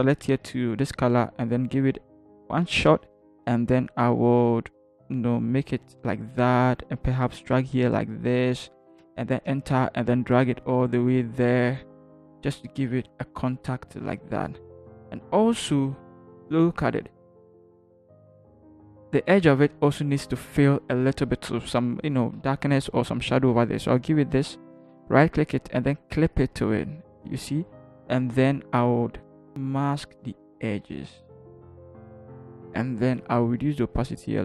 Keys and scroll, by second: 2.6 ctrl+t, 9.4 Return, 9.4 v, 11.8 Up, 12.1 Up, 12.3 Up, 13.0 Up, 14.0 Down, 14.4 Down, 15.8 ctrl+=, 16.4 ctrl+=, 28.4-29.4 typing.